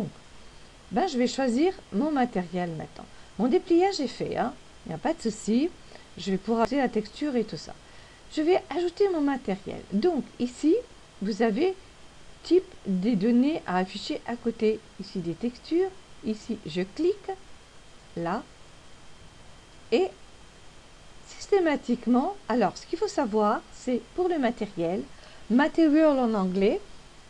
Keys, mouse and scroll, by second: 18.9 click.